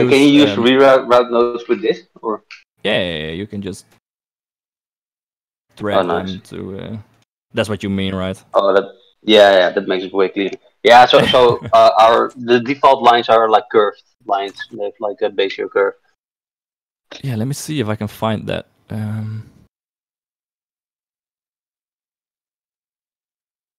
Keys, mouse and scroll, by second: 3.2 shift+right click, 4.4 g, 5.6 shift+middle click, 8.5 click, 8.8 g, 11.5 shift+click, 12.5 ctrl+z, 12.7 ctrl+z, 13.2 ctrl+z, 13.5 ctrl+z, 13.9 ctrl+z, 14.3 ctrl+z, 14.4 ctrl+z, 14.9 ctrl+s, 15.6 click.